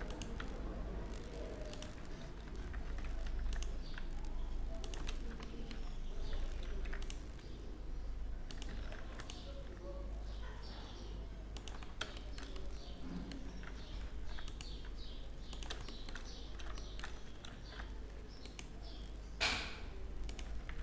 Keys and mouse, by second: 2.9 ctrl+r, 4.7 middle click, 4.9-5.9 middle drag, 6.3 ctrl+r, 8.5 ctrl+r, 12.4 middle click, 13.7 ctrl+r, 17.2 ctrl+r.